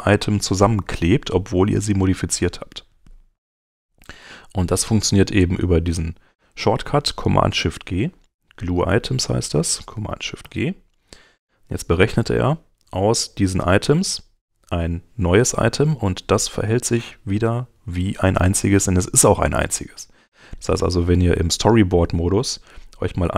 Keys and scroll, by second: 3.5 super+Tab, 7.4 super+Tab, 10.4 shift+super+g.